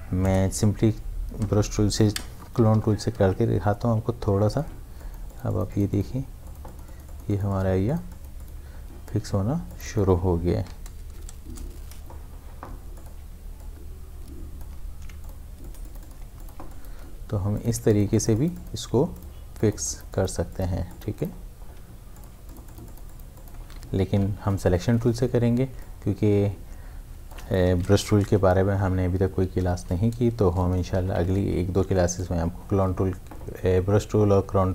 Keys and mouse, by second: 1.4-2.9 typing, 4.5-15.2 alt+drag, 16.4 alt+click, 17.6 alt+click, 19.2 alt+click, 24.2 m, 25.8-27.7 drag, 27.7 shift+F5, 30.9 shift+F5, 31.0 ctrl+d, 31.2-31.9 typing.